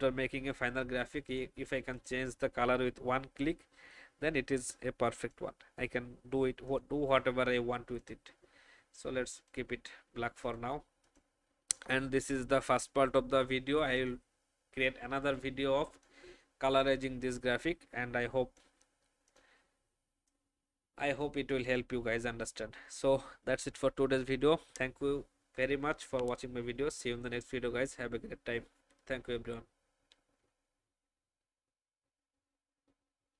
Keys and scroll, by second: 12.0 space.